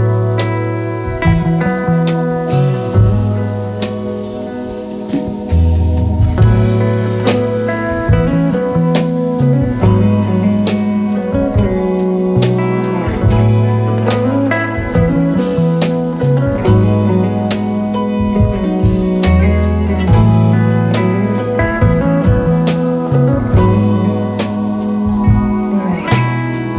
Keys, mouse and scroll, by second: 8.0 shift+click, 15.0 click, 19.0 click, 24.6-25.2 drag.